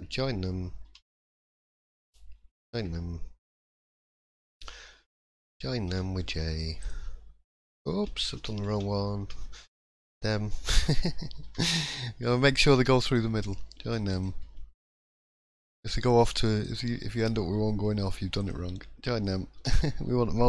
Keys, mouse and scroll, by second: 0.8 j, 1.8 click, 2.6 shift+click, 3.4 j, 4.3 click, 5.1 shift+click, 5.9 j, 6.8 click, 8.0 ctrl+z, 8.7 ctrl+z, 9.8 click, 10.6 shift+click, 11.4 j, 13.0 click, 14.1 shift+click, 15.1 j, 16.6 click, 18.4 shift+click, 19.5 j.